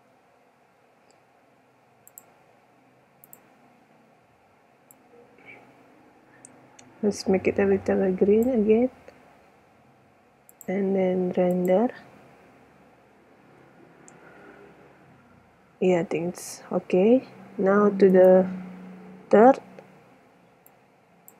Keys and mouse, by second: 0.0 Escape, 5.2 middle click, 6.3-8.9 drag, 10.7-12.1 drag, 14.8 Escape, 18.0 middle click, 20.6 click.